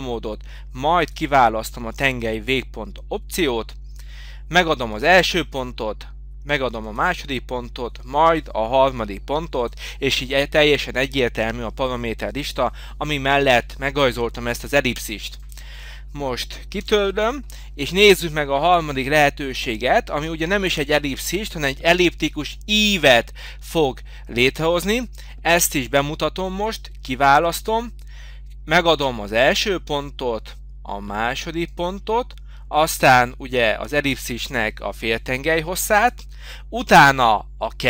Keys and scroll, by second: 16.8 Delete.